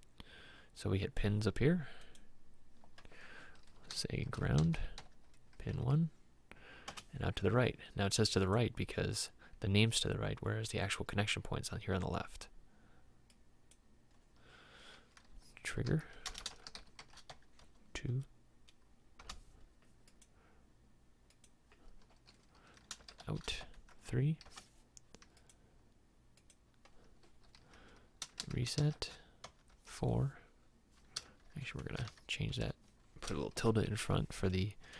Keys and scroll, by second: 4.4 shift+g, 5.8 Tab, 5.8 typing, 6.9 Return, 15.8-17.7 typing, 17.4 Tab, 19.2 Return, 23.1 shift+o, 23.2 shift+u, 23.3 shift+t, 23.6 Tab, 23.9 3, 24.4 Return, 28.4 shift+e, 29.6 Tab, 29.7 4, 31.3 shift+Tab, 32.1 Tab, 32.6 Home, 33.7 shift+`.